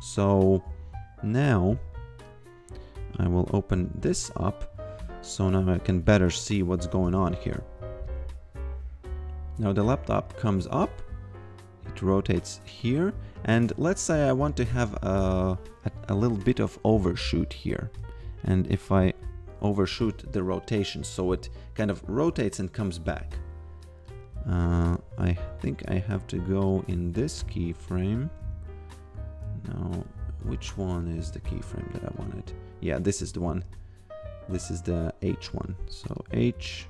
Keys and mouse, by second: 3.0 click, 5.5 click, 8.2 click, 9.7 f, 10.9 click, 14.5 click, 18.7 click, 23.8 click, 27.8 g, 28.4 a, 31.3 click, 33.6 ctrl+z, 36.1 click.